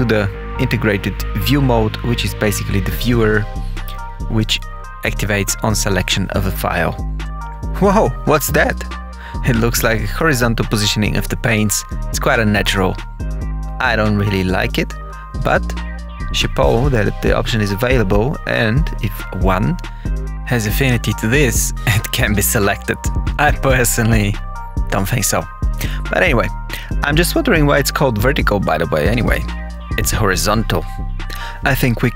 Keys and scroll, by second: 29.7 Page_Down.